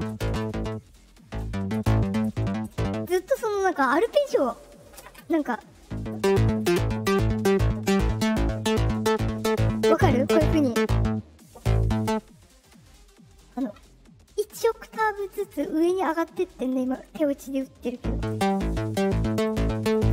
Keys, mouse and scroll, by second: 14.8 click, 16.0 click.